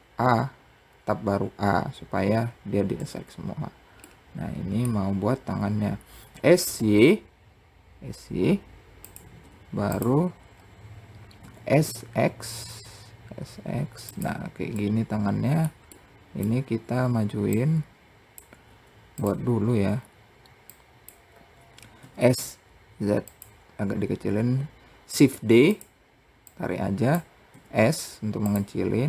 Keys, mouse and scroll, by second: 2.4 Tab, 3.5-4.5 middle drag, 4.5-5.4 scroll down 2, 5.7 s, 9.9-10.8 scroll up 2, 10.8 s, 14.2-16.0 middle drag, 16.0-16.9 scroll down 3, 16.9 click, 19.4-20.1 scroll up 1, 20.1 click, 20.7-21.4 scroll up 2, 21.4 s, 24.5 shift+d, 25.9 click, 26.9 s, 28.5 click.